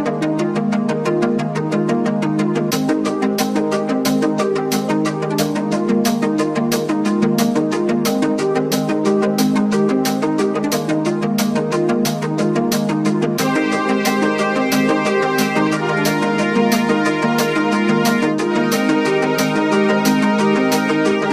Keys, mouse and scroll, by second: 0.5 click, 0.7 right click, 1.1 click, 2.8 click, 6.7 click, 7.7-15.7 drag, 16.5 click, 17.7 click, 18.9 click.